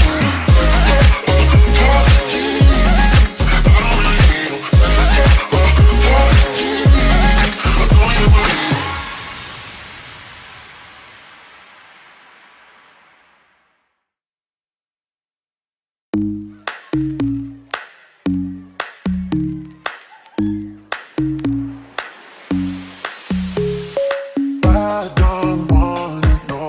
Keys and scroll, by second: 0.0-1.2 typing, 2.3 s, 3.2 a, 3.9 w, 5.7-9.6 typing, 15.7 ctrl+z, 16.2 ctrl+z, 17.6 Escape, 17.9-20.4 typing, 22.2 q, 23.9-26.1 typing.